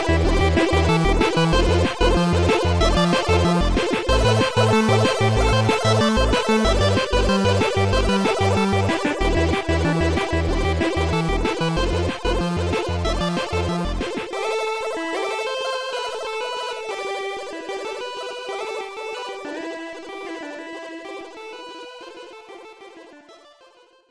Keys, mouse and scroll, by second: 0.0 click, 1.0 click, 2.0 click, 3.4 click, 5.6 click, 6.2 click, 7.1 click, 8.4 click, 12.6 click, 13.5 shift+click, 14.7 shift+click, 16.8 shift+click, 17.8 Delete, 17.8 shift+click, 19.1 shift+click.